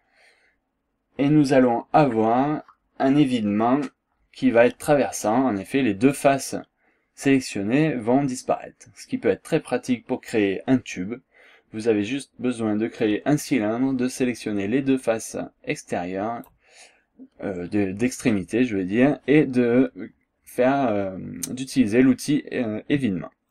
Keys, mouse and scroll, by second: 6.2-10.6 drag, 10.9 scroll down 1, 11.2-12.0 scroll up 2, 12.1 scroll down 1, 12.6 scroll up 1, 15.0-16.6 drag, 16.6 scroll down 1, 16.9 scroll up 1.